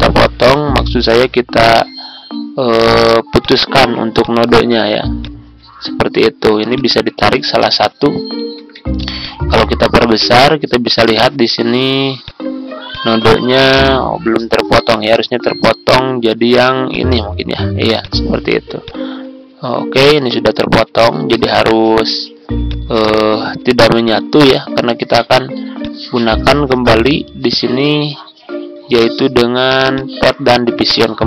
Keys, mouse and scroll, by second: 8.4 ctrl+z, 8.9 ctrl+z, 9.2 click, 13.6 z, 20.3 ctrl+scroll down 1, 22.6 click, 25.7 shift+click, 29.9 click.